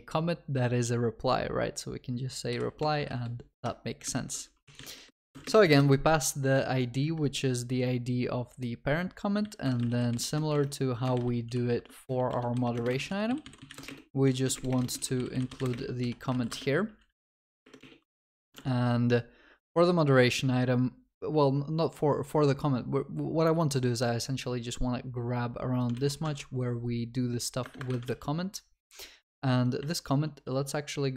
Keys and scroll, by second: 7.1 Escape, 12.4 Return, 18.6 ctrl+Tab, 26.0 ctrl+c, 26.3 ctrl+Tab, 28.3 ctrl+v, 29.8 shift+F6.